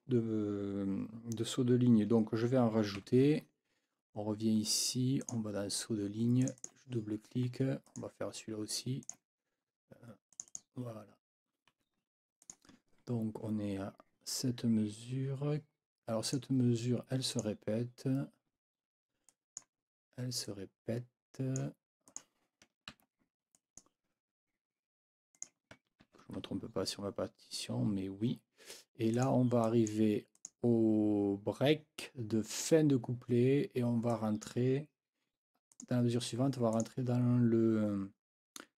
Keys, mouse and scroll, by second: 3.0 F9, 5.2 click, 6.4 click, 7.8 click, 9.0 click, 10.3 click, 11.7 F9, 12.4 click, 16.2 click, 17.3 click, 19.3 click, 20.4-21.8 scroll up 2, 20.5 click, 22.1 scroll up 1, 22.9 ctrl+c, 23.5-24.0 scroll up 1, 25.4 click, 26.0 ctrl+v, 29.1 click, 29.6 click, 30.4 click, 34.1 click, 34.3-34.6 scroll up 2, 35.7 scroll up 2, 36.7 scroll up 2.